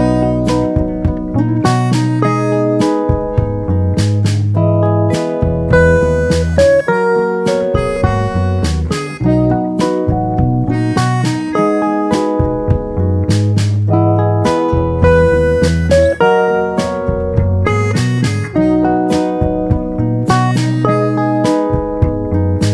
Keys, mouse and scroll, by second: 0.7-2.0 drag, 4.0 click, 9.3 click, 12.2-13.5 drag, 15.1 click, 15.6 click, 18.1-19.6 drag.